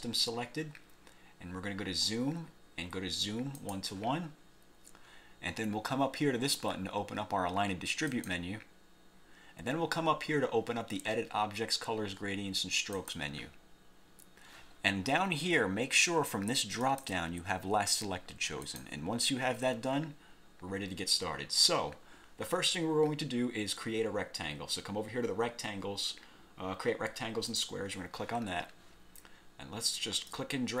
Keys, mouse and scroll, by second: 3.7 click, 8.2 click, 13.1 click, 16.9 click, 18.7 click, 27.6 click, 30.5-30.8 drag.